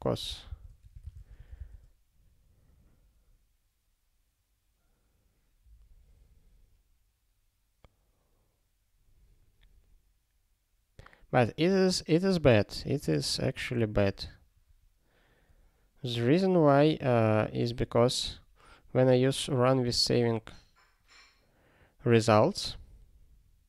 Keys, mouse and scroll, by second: 0.0 BackSpace, 0.3 ctrl+e, 0.5 ctrl+b, 0.8 BackSpace, 1.1 ctrl+s, 22.1 click, 22.3 double click, 23.2 double click.